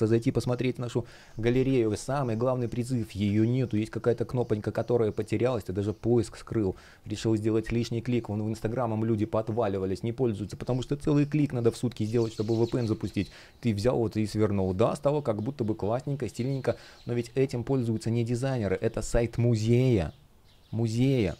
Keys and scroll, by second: 1.6 super+я, 3.0 super+я, 5.2 space, 12.3 super+я, 14.2 space, 15.5 space.